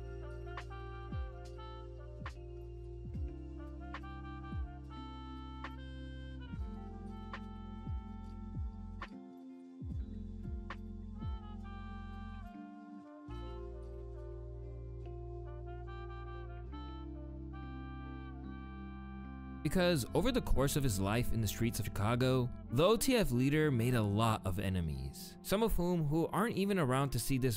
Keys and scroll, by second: 19.3 space.